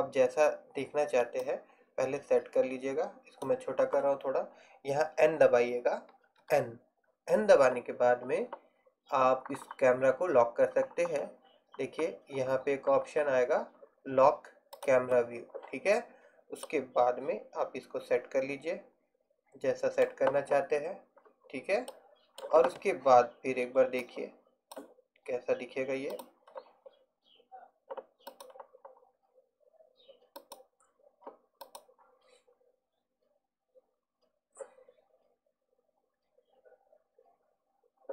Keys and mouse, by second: 1.5 click, 3.3 click, 6.5 n, 17.1 middle click, 22.2 middle click.